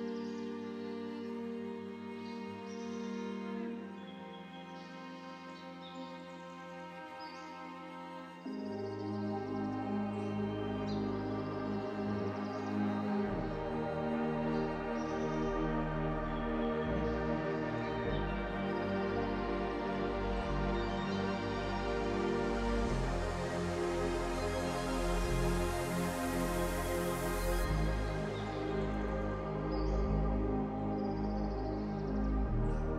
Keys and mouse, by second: 2.2 click, 7.9 alt+shift+click.